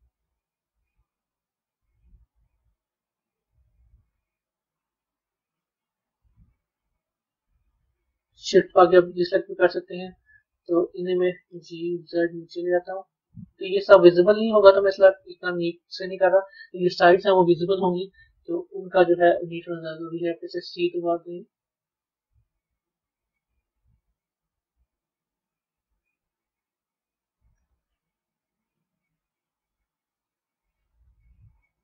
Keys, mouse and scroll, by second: 9.7-11.4 middle drag, 14.8-19.2 middle drag, 25.7-27.8 middle drag.